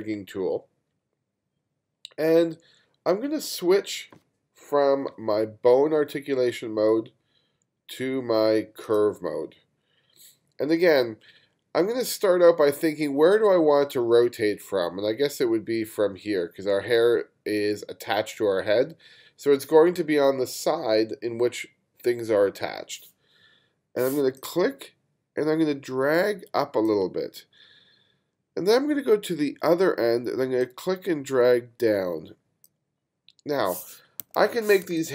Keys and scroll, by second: 34.3 2, 34.9 space.